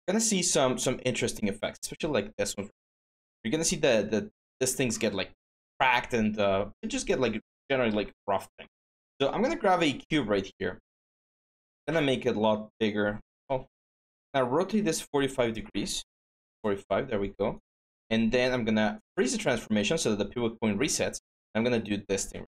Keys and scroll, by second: 3.3-4.0 typing, 6.7 alt+Tab, 13.2 ctrl+z, 16.0-16.8 typing, 22.3 w.